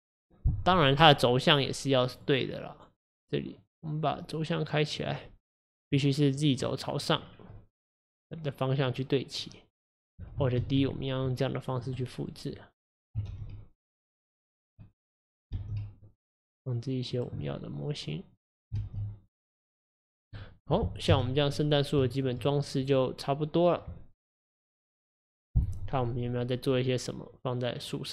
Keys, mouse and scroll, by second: 0.9-2.2 middle drag, 2.2-5.6 drag, 5.6-6.0 scroll up 1, 6.0-7.3 middle drag, 7.3-7.6 scroll down 3, 7.6-10.7 middle drag, 10.7 alt+d, 12.1-13.4 middle drag, 13.4 alt+d, 14.9 middle click, 15.6 alt+d, 17.5-18.9 middle drag, 18.9 alt+d, 20.4 middle click, 21.2 KP_1, 22.1-22.6 shift+middle drag, 22.6-22.9 scroll up 2, 22.9 click.